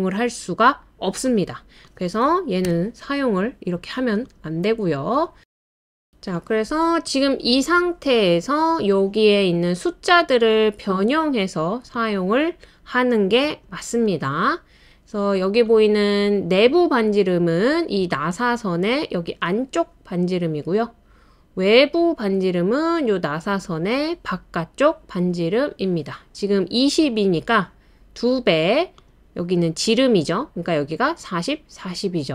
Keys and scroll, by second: 2.6 BackSpace, 3.9 Return, 3.9 typing, 5.2 typing, 15.8 typing, 18.8 typing.